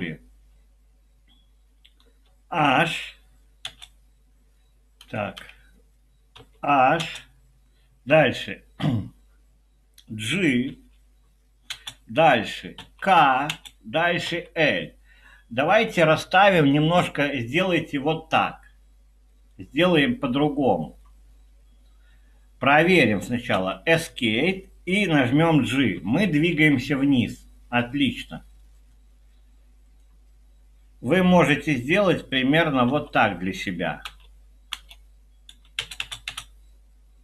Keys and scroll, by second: 1.8-2.5 typing, 3.6-7.0 typing, 10.8-11.7 typing, 12.8-14.3 typing, 23.6 Escape, 25.6-26.9 typing, 32.9 i, 34.0 Return, 34.7 Return, 35.8 space, 36.0 space, 36.3 space.